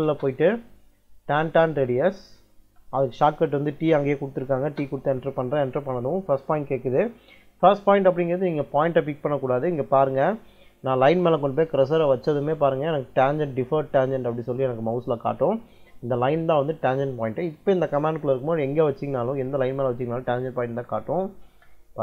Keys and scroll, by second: 2.5 t, 4.5 space.